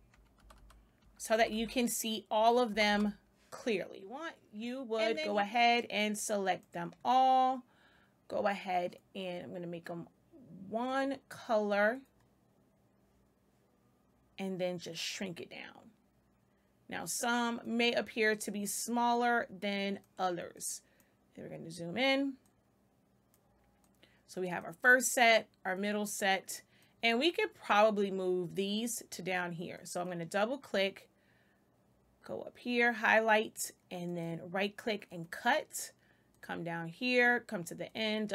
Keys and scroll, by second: 0.0-1.3 typing, 0.0 Right, 1.0 Right, 2.3 Right, 2.6 space.